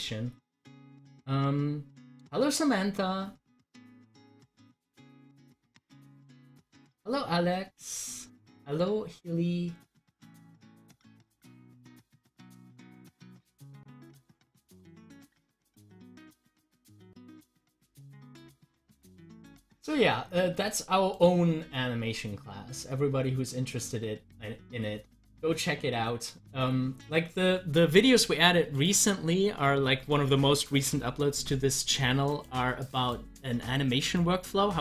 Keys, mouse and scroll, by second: 0.2-2.2 scroll up 1, 8.2-10.3 scroll down 1, 11.2 scroll up 1, 14.3 scroll down 1, 15.4 middle click, 16.4 scroll down 1, 28.8 click, 32.3 click, 34.1 scroll up 1.